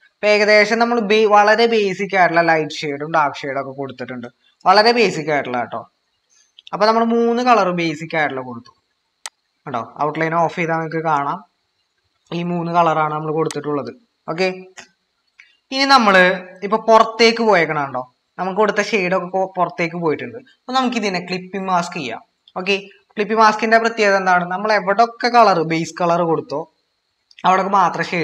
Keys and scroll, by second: 1.0 ctrl+-.